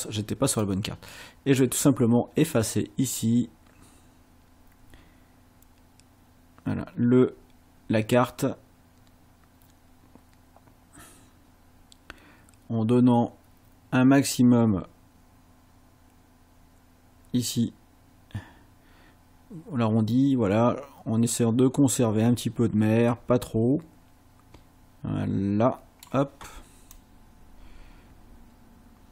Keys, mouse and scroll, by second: 0.6-26.2 drag, 27.0-29.1 drag.